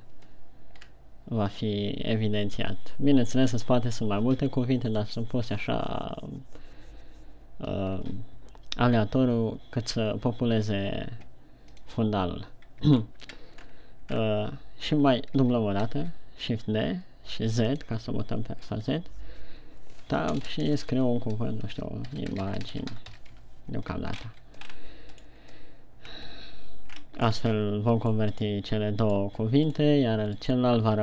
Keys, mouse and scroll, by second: 13.4 shift+scroll down 2, 14.1-14.6 scroll up 2, 14.8 scroll down 1, 15.8 shift+d, 18.2 click, 20.6 Tab, 20.9-21.5 typing, 22.6-23.6 typing, 23.9 Tab, 24.5-24.9 shift+scroll up 3, 25.3 scroll up 1, 25.6 right click, 26.5 scroll down 1, 27.5 scroll down 3, 28.4 right click, 29.5 right click, 30.3 right click.